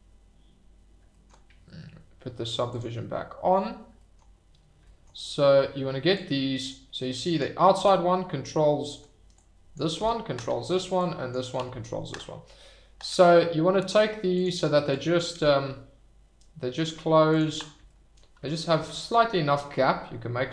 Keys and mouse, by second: 2.7 click, 4.2 shift+click, 6.1 click, 7.2 click, 7.7 g, 8.8 Escape, 9.4 click, 10.0 g, 10.6 Escape, 11.0-11.3 drag, 11.5 g, 14.3 click, 15.1 click, 15.3 g, 17.3 click, 18.6 click, 19.7 g.